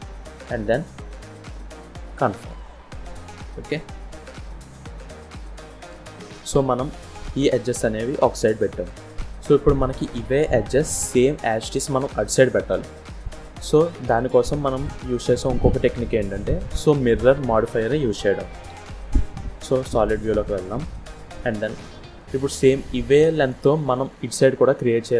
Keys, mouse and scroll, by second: 2.8-3.6 scroll down 2, 3.6 click, 4.0-4.4 scroll down 2, 4.4 middle click, 7.7 KP_1, 8.5 scroll up 2, 8.9-9.9 scroll down 1, 9.9 click, 11.5 middle click, 14.2-14.6 scroll down 2, 14.6 scroll up 1, 16.2-16.7 scroll up 1, 18.6 z, 20.7 scroll down 2, 20.9 middle click, 21.5 scroll up 1, 22.1 click, 23.5 middle click, 25.0 scroll down 1.